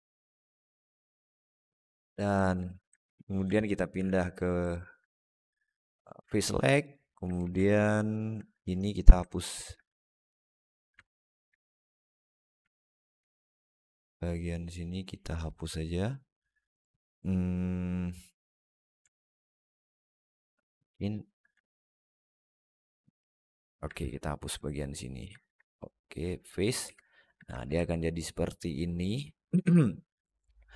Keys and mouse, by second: 1.1 middle click, 2.2 z, 3.8 3, 4.5 alt+middle click, 6.7 click, 7.2 alt+z, 7.5 alt+middle click, 8.8 shift+middle click, 9.1 alt+middle click, 9.7 shift+middle click, 10.9 alt+middle click, 11.4 shift+middle click, 12.5 alt+middle click, 13.5-15.2 alt+middle drag, 19.7 alt+middle click, 20.7 shift+click, 21.5-23.4 alt+middle drag, 23.9 shift+click, 24.4 alt+middle click, 25.0 alt+right click, 25.3 x, 26.7 alt+z, 26.9 alt+middle click, 27.3 Tab, 27.7-29.3 alt+middle drag.